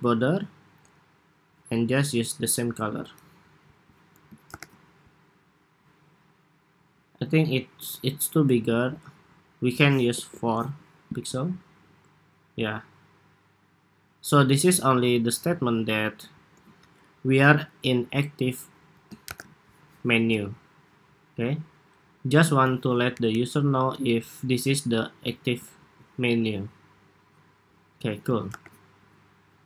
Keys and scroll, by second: 4.2 super+-, 19.0 super+=, 25.5 super+s, 28.3 super+-.